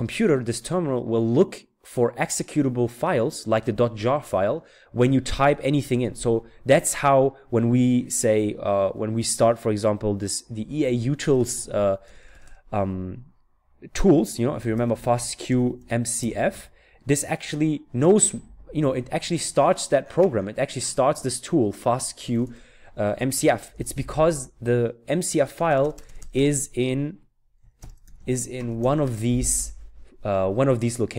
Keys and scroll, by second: 10.3-12.2 typing, 14.2-17.4 typing, 21.8-26.2 typing, 27.3-29.3 typing.